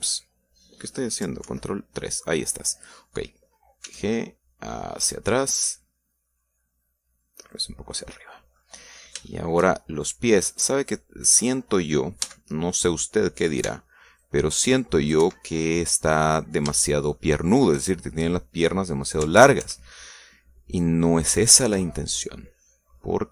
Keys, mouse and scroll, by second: 2.4 ctrl+KP_3, 4.8 g, 8.5 click, 9.0 scroll down 2, 9.3 middle click, 10.1 shift+middle click, 11.3 middle click, 13.2 a, 13.5-14.2 scroll up 1, 14.6 c, 15.2-16.3 drag, 16.1 Escape, 16.5 scroll down 1, 16.7 middle click, 17.8 shift+middle click, 20.3 ctrl+KP_Add, 22.6 ctrl+KP_Subtract.